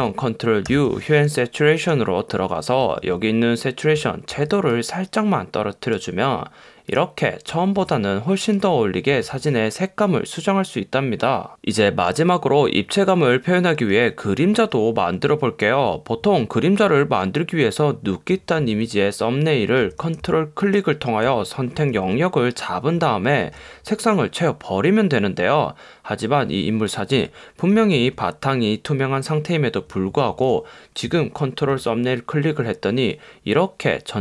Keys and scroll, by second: 0.8 super+u.